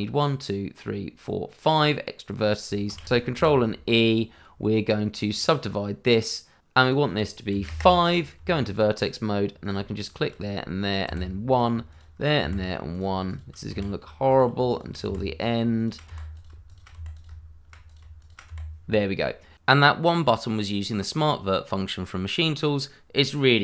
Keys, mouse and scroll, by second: 3.3 ctrl+e, 5.3 click, 6.8 click, 7.5 KP_5, 7.6 KP_Enter, 8.3 Tab, 9.6 click, 9.9 shift+click, 10.0 click, 11.0 1, 11.5 click, 11.9 shift+click, 11.9 click, 12.4 1, 12.9 click, 13.2 shift+click, 13.3 click, 13.7 1, 14.3 click, 14.7 shift+click, 14.7 click, 15.0 1, 15.4 click, 15.7 shift+click, 15.8 click, 16.0 1, 16.3 click, 16.6 shift+click, 16.7 click, 16.9 1, 17.1 click, 18.2 shift+click, 18.4 1, 18.8 scroll down 1.